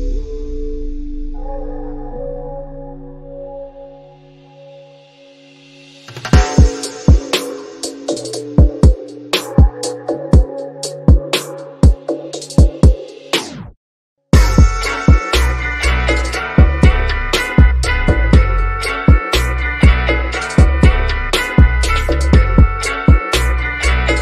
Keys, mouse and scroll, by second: 4.7 scroll down 1, 5.7 click, 6.5-8.2 middle drag, 8.2 click, 14.9-15.6 scroll down 1, 15.6-16.7 scroll up 1, 16.7-17.4 scroll up 1, 17.4 ctrl+t, 20.1 click, 22.7-24.2 drag.